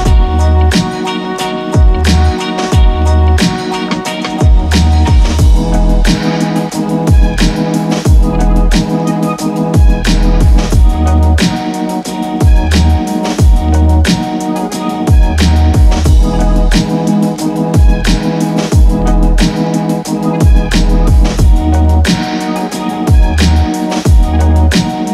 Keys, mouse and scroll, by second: 9.3-18.7 drag, 18.8 ctrl+Num_Lock, 18.8 click, 19.0 ctrl+z, 20.0 click, 21.3-21.7 scroll down 1, 22.1 click.